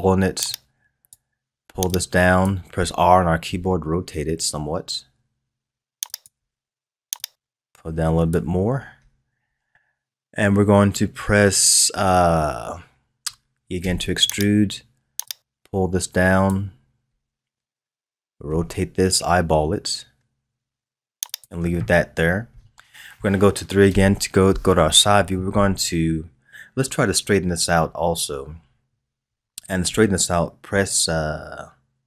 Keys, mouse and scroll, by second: 0.5-3.4 drag, 3.4 r, 7.2-10.2 drag, 13.8 e, 15.2-18.2 drag, 18.4 r, 23.8 KP_3, 26.9-30.0 scroll up 2.